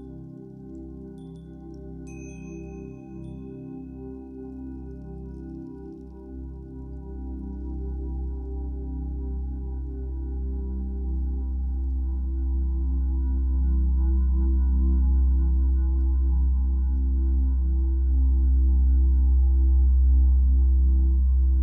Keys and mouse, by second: 1.5 click, 6.9 click, 8.9-9.8 shift+drag, 10.6-11.7 shift+drag, 12.1 shift+click, 13.1 click, 13.8 click, 15.3-17.8 drag, 17.8 shift+a, 18.9 click, 20.1-21.6 drag.